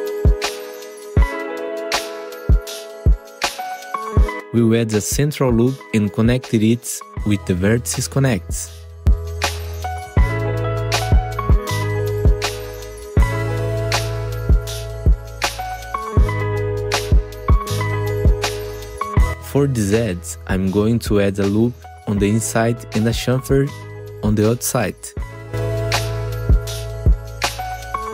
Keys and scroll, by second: 1.4 ctrl+shift+e, 2.9 ctrl+shift+e, 4.0 ctrl+shift+e, 5.2 ctrl+shift+e, 5.5 2, 6.0 ctrl+r, 10.8 1, 12.7 ctrl+shift+e, 15.5 ctrl+shift+e, 16.7 2, 17.9 ctrl+z, 27.7 ctrl+shift+c.